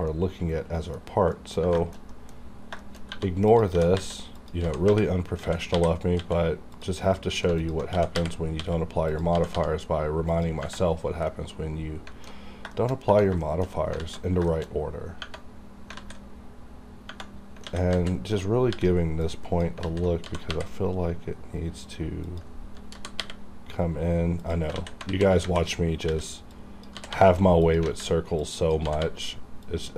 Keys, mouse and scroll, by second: 1.0-1.3 scroll up 1, 1.3 middle click, 1.8 shift+middle click, 2.0-2.4 scroll up 2, 2.1 middle click, 2.8 shift+middle click, 3.0 shift+scroll up 1, 3.1-6.2 typing, 3.5 click, 4.4 click, 6.7 click, 7.6 alt+click, 7.9 g, 8.6 x, 9.1 click, 9.3 g, 9.5 g, 10.3 click, 10.9-11.3 scroll down 1, 11.3 middle click, 12.4 alt+scroll up 2, 12.7 shift+middle click, 13.0 scroll up 1, 13.4 shift+middle click, 13.7 shift+scroll up 1, 14.0 alt+z, 14.5 shift+middle click, 15.1 scroll up 1, 15.6-16.7 scroll down 3, 16.0 alt+z, 17.6 alt+a, 17.8 alt+z, 18.7 b, 19.2 click, 19.8 alt+z, 20.2 g, 22.2 click, 22.3 click, 22.9 g, 24.4 click, 24.8 alt+a, 25.1 alt+z, 25.4 alt+a, 26.1 b, 26.5 click, 26.9 g, 27.1 g, 27.6 click, 27.9 alt+a, 28.4 click, 28.8-29.9 typing, 29.6 click, 29.7 click.